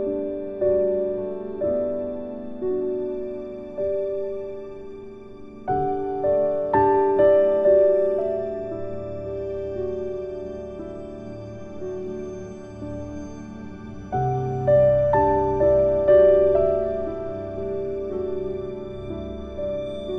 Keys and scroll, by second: 11.1 ctrl+z, 17.5 ctrl+z.